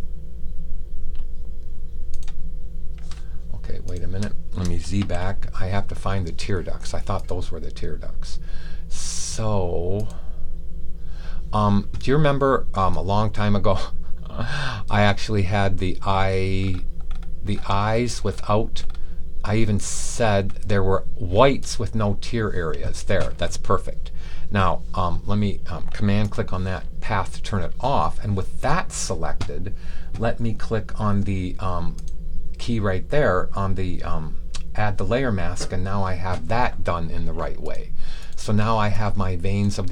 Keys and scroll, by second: 4.9 z.